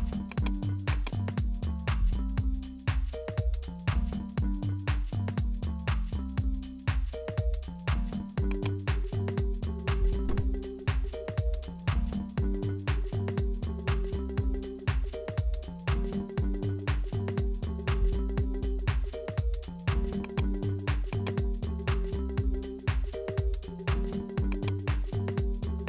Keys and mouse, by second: 0.9 click, 2.3 e, 9.8-13.1 drag, 13.1 s, 21.1 click, 24.5 click.